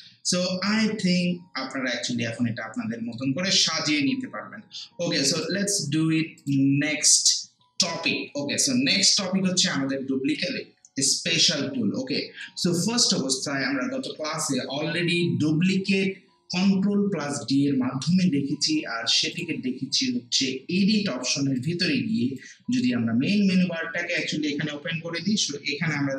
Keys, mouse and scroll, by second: 5.3 click, 19.3 click, 21.6-26.1 drag.